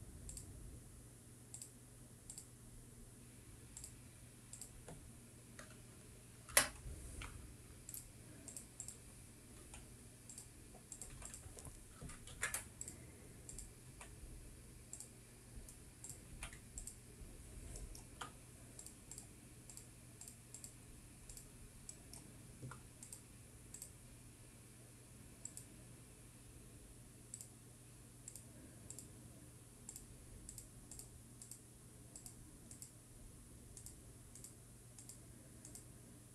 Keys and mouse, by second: 3.4-7.7 middle drag, 9.1 click, 9.6 click, 10.0 click, 10.8 x, 12.3 x, 13.5 ctrl+z, 15.0 x, 17.5 x, 18.9 middle click, 20.1 click, 21.5 click, 22.5 click, 23.1 shift+middle click, 24.3-25.0 drag, 29.5-36.3 drag.